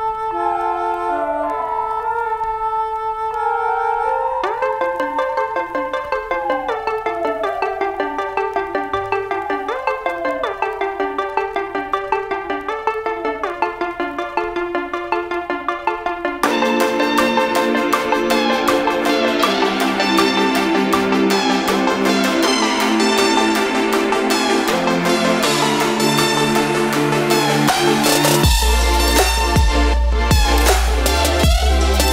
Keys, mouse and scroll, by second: 4.0 right click, 4.9 click, 6.9 ctrl+space, 7.1 ctrl+click, 7.3 ctrl+space, 7.6 click, 10.1 click, 19.0 8, 20.6 click, 21.5 0, 22.2 click, 22.5 0, 23.6 click, 30.1 2.